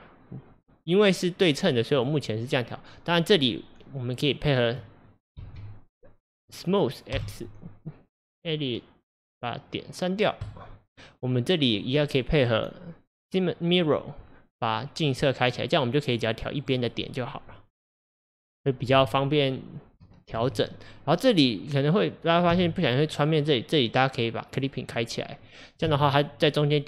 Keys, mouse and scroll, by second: 2.0 click, 3.3 click, 5.4 alt+z, 5.9 click, 7.2 x, 11.8 click, 12.1-15.2 drag, 15.5 click, 16.6 click, 18.9 g, 22.6 g, 24.6 click, 25.9 g.